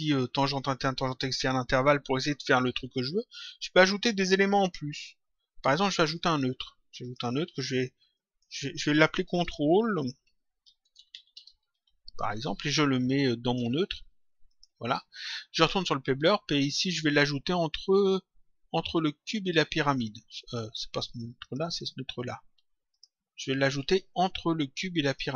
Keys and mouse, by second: 6.3 click, 8.1 click, 9.4-11.8 typing, 12.7 click, 14.4 click, 17.8 click, 21.3 click, 22.9 click, 24.1 click.